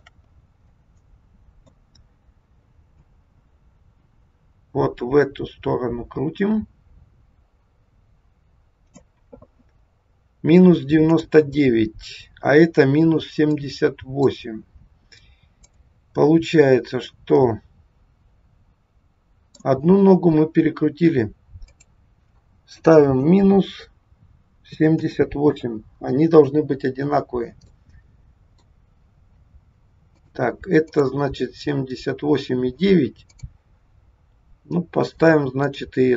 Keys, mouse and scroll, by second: 0.3-1.0 scroll up 3, 0.7 middle click, 2.9 click, 11.0 click, 13.4 middle click, 14.5 scroll down 1, 15.6 click, 17.1 middle click, 21.7 click, 27.7 middle click, 30.0 click, 30.8 click, 33.2 click, 35.7 click.